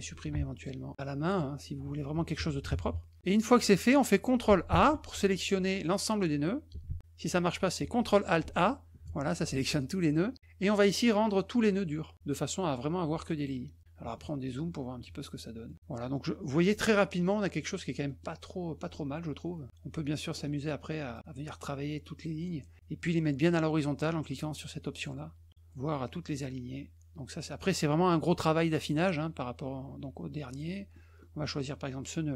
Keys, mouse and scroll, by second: 0.5 ctrl+alt+click, 1.3 ctrl+alt+click, 3.1 middle click, 3.3 middle click, 3.6 middle click, 4.7 ctrl+a, 6.8 ctrl+a, 8.4 ctrl+alt+a, 13.3 click, 15.6 middle click, 17.2 middle click, 18.0 middle click, 18.8 middle click, 20.3 middle click, 21.1 click, 21.8 click, 24.9 click, 26.1-27.6 drag, 29.2-30.6 drag, 30.9 middle click.